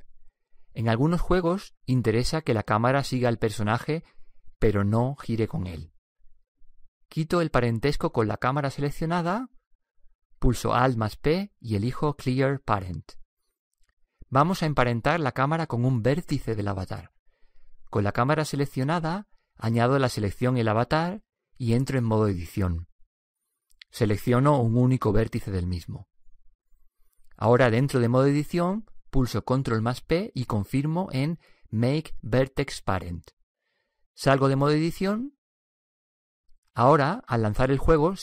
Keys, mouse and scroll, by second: 8.1-11.6 right drag, 11.6 alt+p, 20.9-22.7 right drag, 23.3 Tab, 24.7-27.6 right drag, 28.0-29.8 drag, 28.8-32.9 right drag, 31.3 ctrl+p, 35.3 Tab.